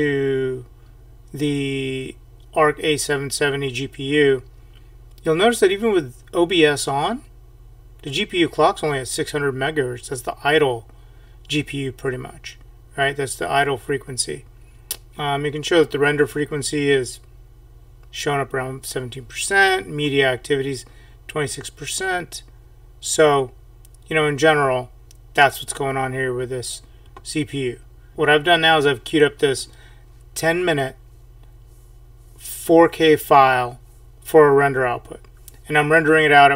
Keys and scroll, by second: 28.1 ctrl+alt+l.